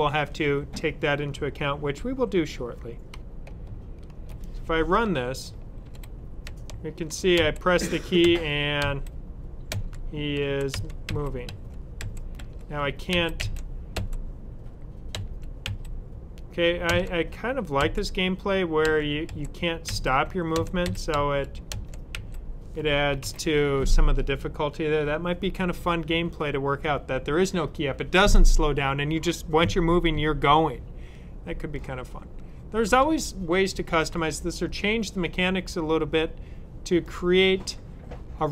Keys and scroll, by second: 5.3 Right, 10.3-13.9 typing, 15.0-15.5 typing, 16.7-17.7 typing, 18.7-22.0 typing, 19.2 Down, 23.1 super+w, 25.6 typing.